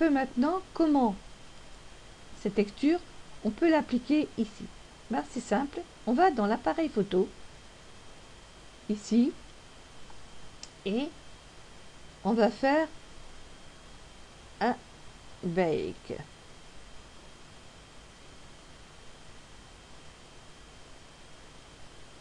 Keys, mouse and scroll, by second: 12.3 click, 18.8 click.